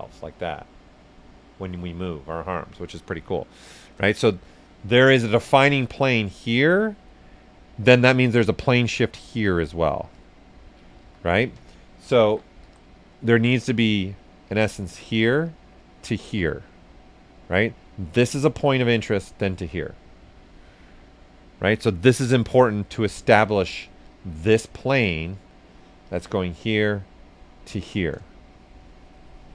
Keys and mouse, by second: 5.0 s, 5.1 click, 6.2-7.6 drag, 7.6 right click, 8.5 click, 10.0 ctrl+z, 10.1 ctrl+click, 11.0 ctrl+z, 11.8-13.1 typing, 13.0 click, 13.2 right click, 13.8-19.9 drag, 19.9-21.6 right drag, 21.6 s, 21.9 click, 24.0 right click, 24.9 alt+click, 28.2 alt+shift+click, 28.5-29.5 shift+drag.